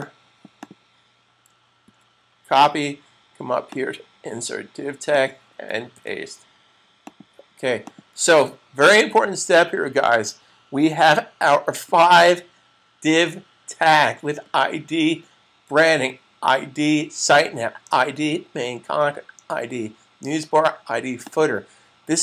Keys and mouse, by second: 0.1 double click, 1.8 super+c, 3.8 double click, 6.0 super+v, 7.2 click, 8.0 click, 8.4 super+s, 21.0 click.